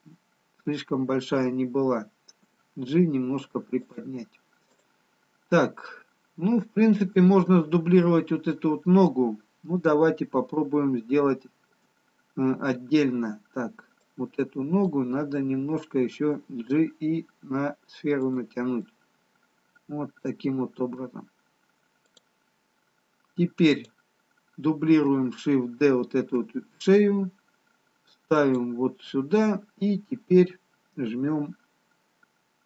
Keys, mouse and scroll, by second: 2.7 middle click, 2.7 g, 4.7 click, 10.8 shift+middle click, 14.1 click, 18.3 g, 18.9 middle click, 22.5 click, 24.0 click, 26.3 shift+d.